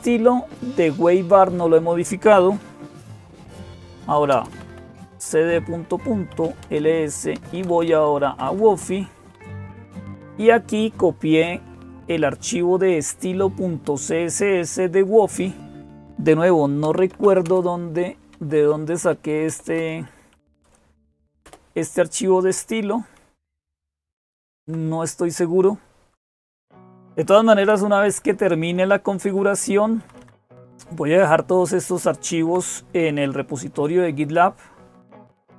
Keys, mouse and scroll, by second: 0.0-35.5 typing, 20.3 Tab, 21.3 Return, 22.3 Up, 23.3 Down, 23.9 Down, 24.0-24.5 Down, 25.8 Page_Down, 26.5 Page_Down, 27.8 Page_Up, 28.1 Page_Up, 28.3 Page_Up, 28.5 Page_Up, 28.7 Page_Up, 29.1 Page_Up, 29.9 Up, 30.0 Up, 30.7 Down, 31.4 Down, 31.5-32.4 Down, 34.4-35.5 Down.